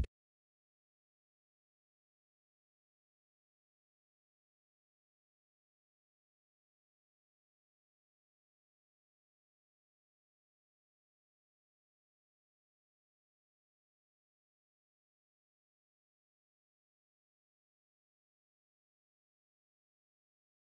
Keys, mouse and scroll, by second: 3.1 middle click, 10.3 KP_0.